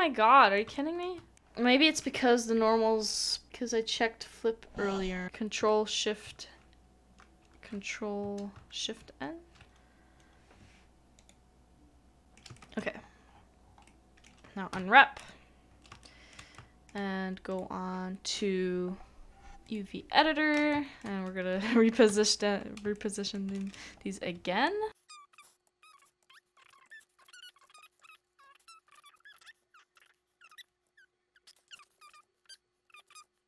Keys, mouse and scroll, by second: 0.7 shift+middle click, 6.3 alt+c, 8.6 ctrl+s, 9.7 ctrl+shift+n, 12.2 scroll down 1, 12.5 shift+middle click, 12.9 scroll up 1, 13.0 scroll down 1, 13.6 scroll up 1, 13.7 scroll down 1, 13.8 middle click, 16.0 shift+middle click, 16.5 middle click, 20.7 middle click, 22.9 shift+middle click, 25.8 double click, 26.8-27.2 typing, 30.4 typing, 31.5 typing, 31.6 shift+middle click, 31.9 shift+middle click, 33.2 typing.